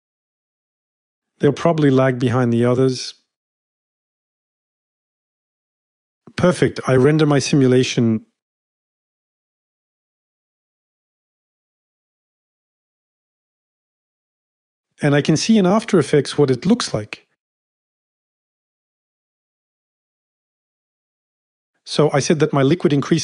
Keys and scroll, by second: 17.6 space, 20.6 space.